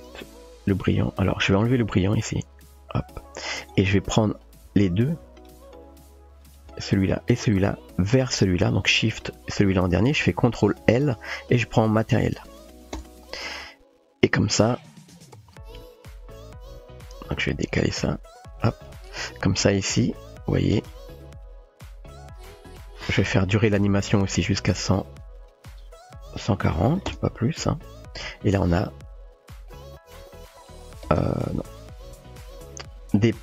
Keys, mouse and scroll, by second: 2.4 click, 6.4 click, 6.9 shift+click, 8.2 shift+click, 12.4-13.5 typing, 15.8-17.6 typing, 17.0 click, 17.8-18.6 shift+middle drag, 20.8 space, 23.4 middle click, 25.4-27.6 drag, 31.1 space, 32.5 middle click.